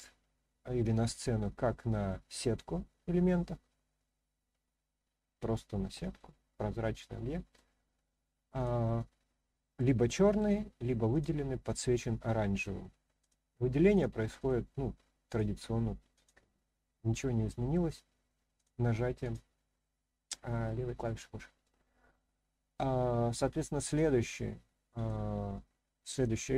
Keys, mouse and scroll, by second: 3.9-6.2 middle drag, 6.8-7.5 middle drag, 8.5 click, 9.7-10.4 middle drag, 11.1 click, 11.9-12.6 middle drag, 13.2 click, 13.9 click, 14.4 click, 15.2 click, 16.1 click, 17.0-17.7 middle drag, 17.7 scroll up 1, 18.5 click, 19.2 click, 19.8-20.3 middle drag, 21.6-22.7 middle drag, 23.8 click, 24.4-25.0 middle drag.